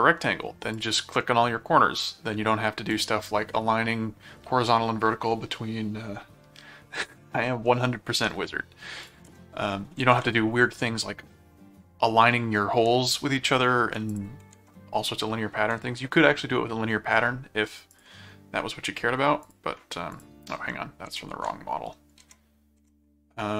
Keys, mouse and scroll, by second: 0.7 click, 2.0 click, 2.9 click, 9.0 ctrl+click, 9.3 ctrl+Tab, 10.2 shift+Tab, 14.1 ctrl+click, 14.5 ctrl+Tab, 17.9 click, 19.4 ctrl+click, 20.1 ctrl+click, 20.6 ctrl+Tab, 22.2 ctrl+Tab, 23.0 Tab.